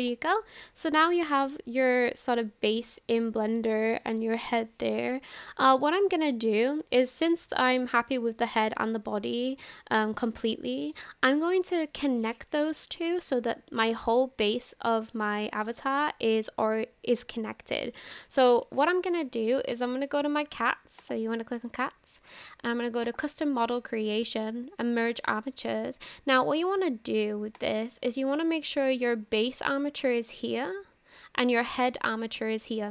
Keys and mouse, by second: 0.3-0.7 shift+middle drag, 1.6-2.0 shift+middle drag, 2.5-3.2 shift+middle drag, 23.1 click, 27.5 click.